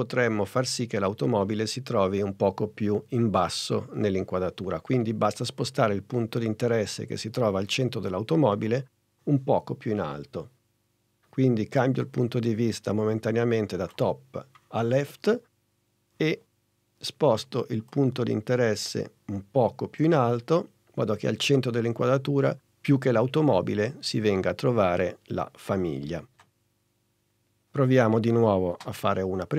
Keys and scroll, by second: 28.8 space.